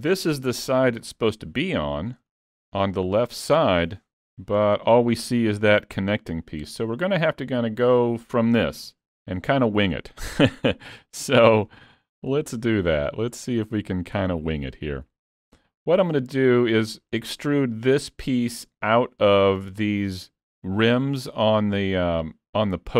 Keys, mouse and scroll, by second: 1.1 shift+middle click, 1.5 scroll up 2, 1.8 shift+middle click, 6.7-7.1 scroll up 2, 7.1 shift+middle click, 10.4 scroll up 1, 10.5 middle click, 11.6-12.4 shift+scroll up 3, 12.4 shift+middle click, 13.0 middle click, 13.5-14.4 scroll up 4, 13.9 shift+middle click, 14.4 middle click.